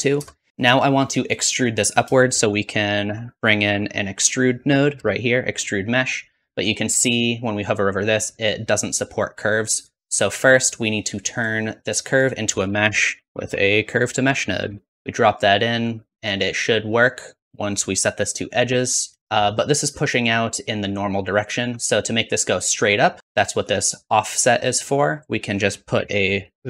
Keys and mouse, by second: 2.1 shift+a, 7.4-10.6 drag, 12.2 click, 13.0 shift+a, 17.2-18.4 drag, 19.2 shift+z, 21.4 shift+click, 25.5-26.6 drag.